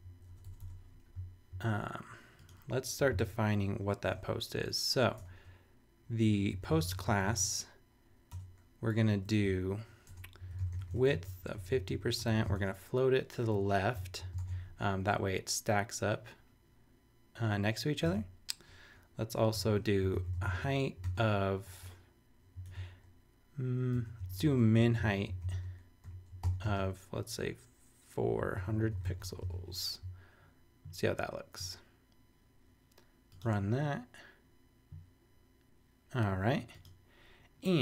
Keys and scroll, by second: 0.3 BackSpace, 1.1 super+BackSpace, 3.0 Return, 3.6 shift+Return, 4.1 shift+4, 5.2 BackSpace, 6.3-7.4 typing, 8.2 Return, 9.4 Up, 10.1 Tab, 10.1-12.8 typing, 13.5 Right, 14.4 super+Tab, 18.0 super+Tab, 19.5 Return, 19.8-21.6 typing, 22.5 super+space, 22.6 super+BackSpace, 23.9 Tab, 24.0-26.6 typing, 28.2-29.7 typing.